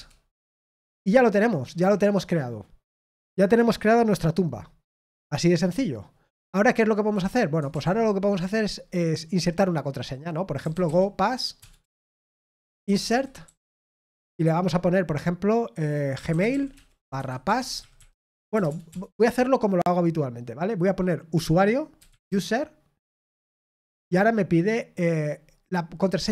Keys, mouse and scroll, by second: 16.8-18.1 typing.